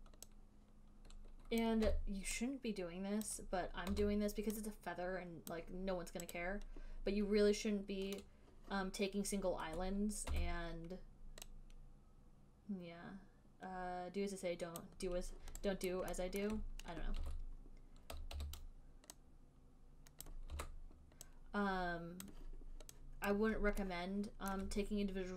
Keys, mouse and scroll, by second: 1.9 click, 2.2 r, 3.6 click, 3.6 r, 4.3 w, 5.8 click, 6.6 click, 10.5 e, 15.1 click, 15.9 click, 16.1 alt+right click, 16.7 alt+middle click, 17.5 w, 18.6 r, 20.5 click, 20.8 w, 22.6 click, 23.6 click, 24.8 alt+middle click.